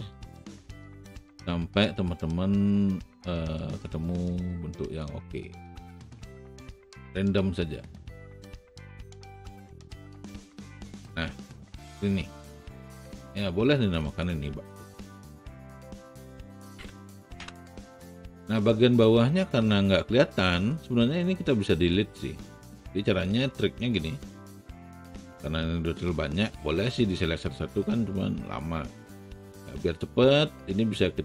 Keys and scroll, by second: 16.6-17.3 typing.